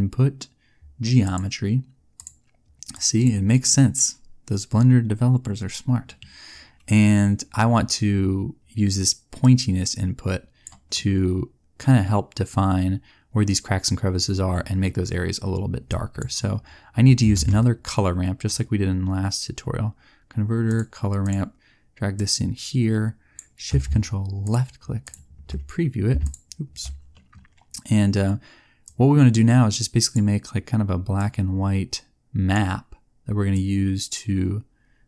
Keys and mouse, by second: 9.5-13.3 drag, 15.8-17.3 drag, 17.3 shift+a, 22.1-25.5 drag, 31.1 middle click.